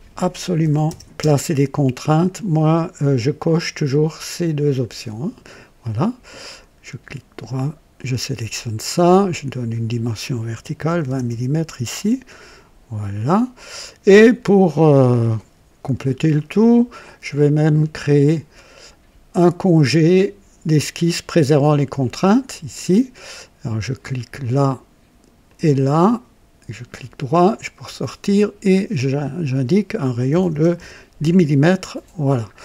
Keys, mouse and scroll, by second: 0.0-1.2 typing, 1.2 KP_Enter, 3.4 click, 6.4 right click, 7.9 click, 9.1 click, 10.8-11.8 typing, 13.1-14.0 drag, 14.1-14.5 scroll up 1, 14.7 right click, 15.9-16.6 typing, 15.9 scroll down 1, 16.3 right click, 17.2 click, 18.5 click, 22.1 click, 24.4 click, 25.5 click, 26.0 right click, 27.4 click, 29.0 click, 30.3 KP_1, 30.5 KP_0, 30.5 KP_0, 30.7 Return, 30.8 KP_Enter, 31.7-32.5 scroll down 4.